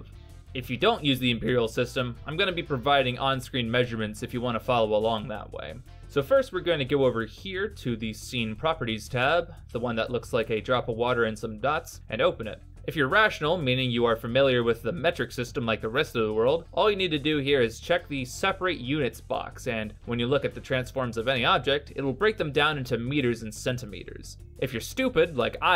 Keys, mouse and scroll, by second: 7.2 middle click, 11.8 click, 16.5 click, 19.5 click, 19.8 n, 21.7 g.